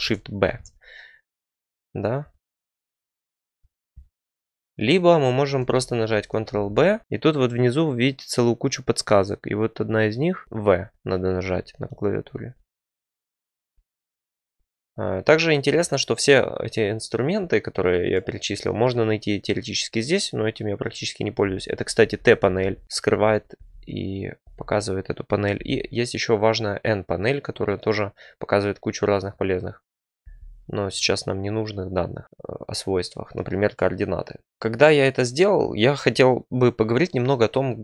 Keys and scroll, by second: 0.4 ctrl+shift+b, 5.6 ctrl+z, 6.4 ctrl+b, 10.4 v, 21.9-24.3 typing, 25.5 n, 30.1 n.